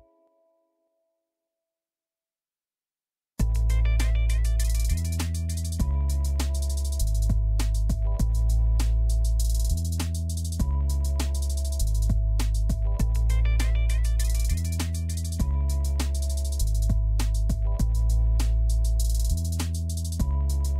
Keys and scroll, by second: 4.7 1.